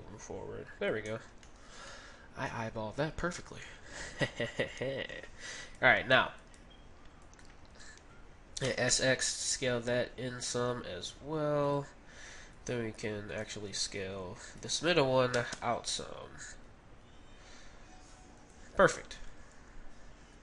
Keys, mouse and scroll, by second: 1.5-5.5 middle drag, 5.6-9.0 right drag, 8.7 s, 12.5-16.5 right drag, 15.3 s, 18.7 Tab, 19.0-20.4 middle drag, 19.2 z.